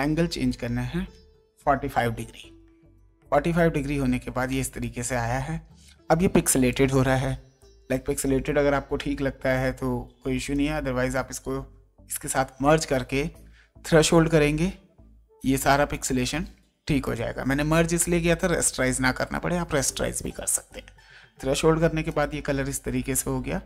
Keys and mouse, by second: 0.0 click, 2.0 KP_4, 2.4 KP_5, 4.8 ctrl+space, 4.8 click, 5.8 ctrl+space, 6.7 ctrl+click, 7.8 space, 9.5 click, 10.5 ctrl+click, 11.2 ctrl+e, 15.9 click, 17.0 click, 20.5 click, 22.1 click.